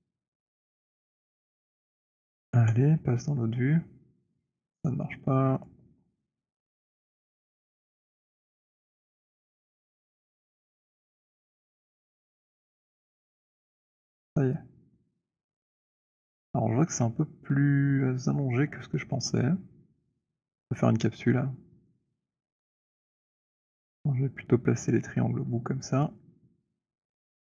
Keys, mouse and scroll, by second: 0.5 middle click, 1.8 middle click, 2.5 scroll, 5.7 click, 11.4 click, 13.1-13.7 scroll, 15.6 click, 22.7 e, 26.1 click.